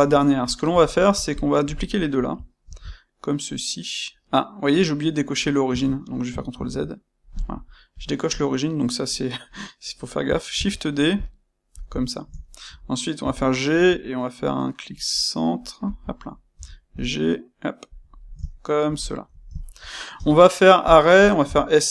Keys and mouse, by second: 1.2 shift+click, 2.7 shift+d, 5.7 Escape, 6.5 ctrl+z, 7.9 click, 10.6 shift+d, 11.7 click, 12.3-15.9 shift+middle drag, 13.2 g, 15.9 ctrl+click, 16.5 g, 17.8 ctrl+click, 18.1-19.5 ctrl+middle drag, 20.0-21.9 middle drag, 20.0 space.